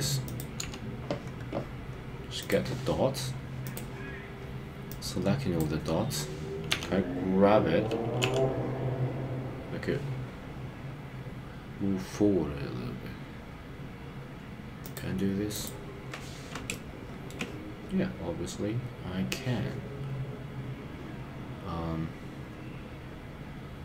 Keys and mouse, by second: 0.5 KP_3, 5.2 click, 6.8 g, 8.3 y, 14.9 click, 16.7 shift+middle click.